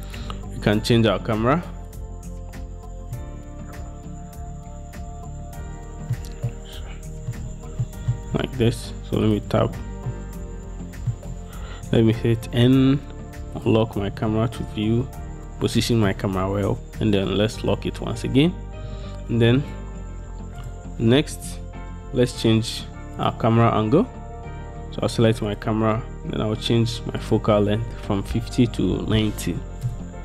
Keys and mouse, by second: 6.7-7.4 drag, 8.0 drag, 10.2 shift+click, 12.2 n, 14.5-16.2 shift+drag, 19.1 b, 21.4 n, 23.3 click, 27.4-30.1 drag.